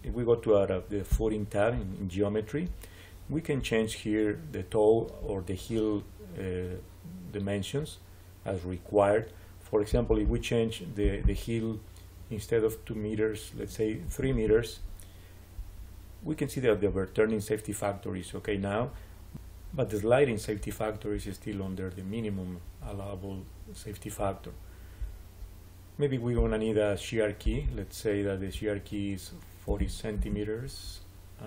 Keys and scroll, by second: 14.0 3, 14.2 Return, 29.4-30.2 typing.